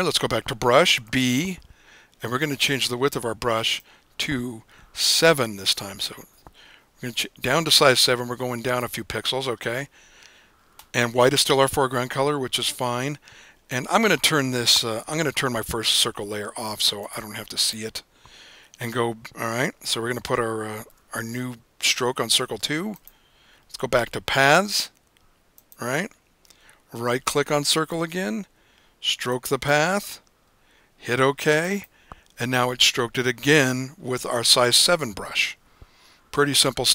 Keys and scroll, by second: 1.1 b, 6.3 7.